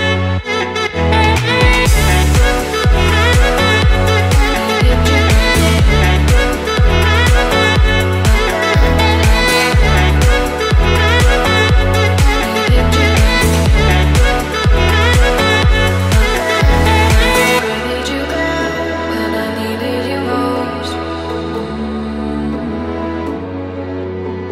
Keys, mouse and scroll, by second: 0.7-2.4 drag, 3.4-6.6 drag, 7.2-7.8 scroll down 3, 8.0-8.9 shift+middle drag, 9.7 click, 10.3-10.7 scroll down 1, 10.7-17.3 shift+middle drag, 17.7-18.2 scroll up 1, 18.4 shift+scroll up 1, 18.5-19.2 shift+middle drag.